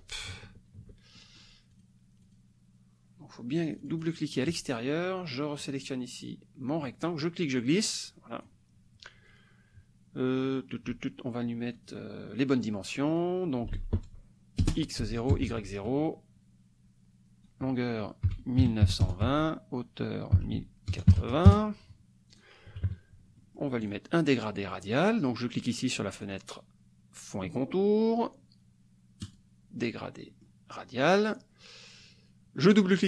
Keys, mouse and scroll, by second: 1.2 ctrl+shift+click, 2.3 click, 3.5 click, 5.6 click, 7.2-8.6 drag, 11.8 click, 13.1 click, 13.7 ctrl+a, 15.0 Tab, 15.3 KP_0, 15.4 Tab, 18.6 KP_9, 18.8 KP_2, 19.0 KP_0, 19.3 Tab, 20.3 KP_1, 21.1 KP_8, 21.2 KP_0, 21.5 KP_Enter, 22.3 click, 22.7 KP_Subtract, 23.3 click, 23.4-23.7 scroll up 1, 23.8 click, 26.2 click, 29.2 click, 30.3-32.6 scroll up 1, 32.6 click.